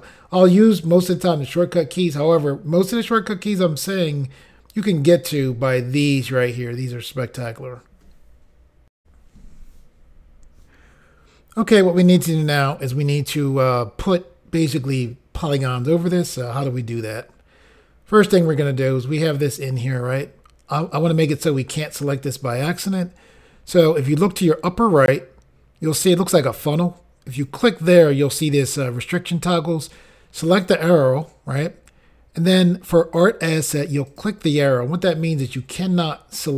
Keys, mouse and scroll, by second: 9.0 Insert, 27.3 click, 30.5 click, 34.1 click.